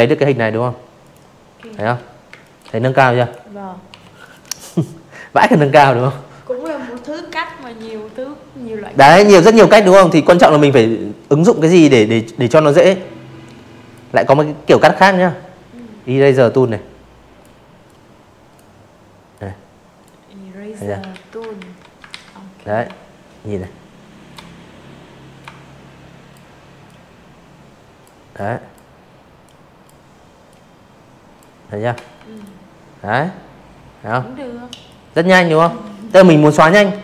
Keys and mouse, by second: 0.1 click, 0.8 Delete, 1.1 click, 8.5-10.9 drag, 13.5 click, 14.8 click, 16.2 click, 18.1 ctrl+z, 18.5 ctrl+z, 19.0 ctrl+z, 20.5 shift+click, 22.4 shift+click, 23.8-25.0 shift+drag, 25.3 shift+click, 26.4 shift+click, 27.5 shift+click, 29.1 v, 29.3 click, 31.8 drag, 32.6 ctrl+z, 32.9 click, 33.5 click.